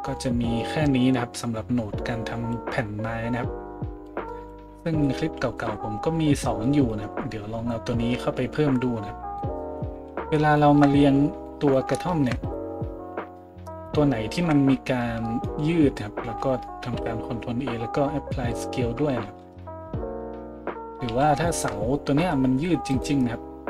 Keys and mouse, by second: 11.1 z, 12.4 middle click, 12.4 right click, 13.7 middle click, 13.7 right click, 14.4 KP_Decimal, 16.8 ctrl+a, 19.6 shift+z, 21.1 a, 22.9 middle click, 22.9 right click.